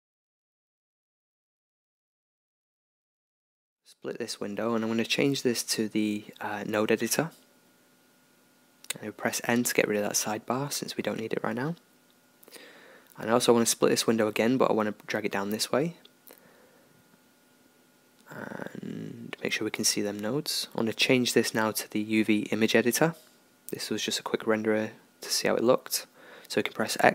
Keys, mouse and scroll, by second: 11.5-13.4 middle drag, 13.4-14.4 scroll up 1, 14.4-16.4 drag, 16.4-20.8 middle drag, 20.8-24.5 drag, 24.5-26.7 middle drag, 26.7-27.1 drag.